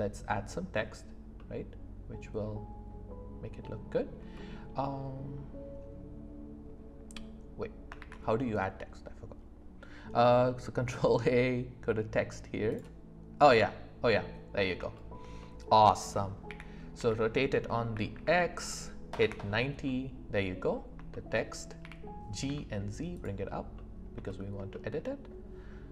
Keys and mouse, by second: 1.3-2.4 middle drag, 4.3 middle click, 8.0 shift+a, 13.6-14.6 middle drag, 14.9 shift+middle drag, 15.4-15.7 middle drag, 16.5 r, 16.9 x, 17.9 KP_9, 19.2 Return, 19.8 click, 21.1 shift+click, 21.8 g, 22.4 z, 23.7 middle click, 24.2 shift+middle drag, 24.7 middle click.